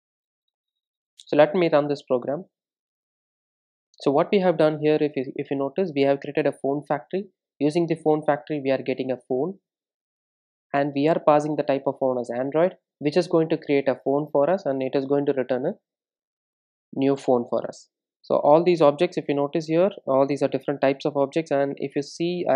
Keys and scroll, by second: 0.0 super+s.